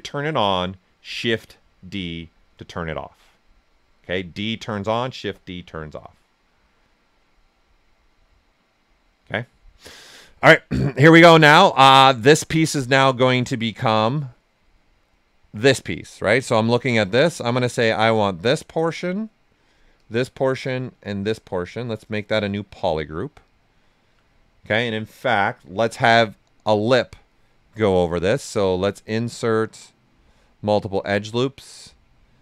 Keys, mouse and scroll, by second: 13.2-16.7 alt+right drag, 16.8 ctrl+right click, 17.3 right click, 18.1 alt+click, 18.4 alt+right click, 19.0 click, 19.3 right click, 19.9 alt+click, 20.2 right click, 21.0-22.6 alt+drag, 22.6 right click, 24.2 right click, 25.0 alt+right click, 28.1 space, 28.8 click, 30.3 click, 31.0 space.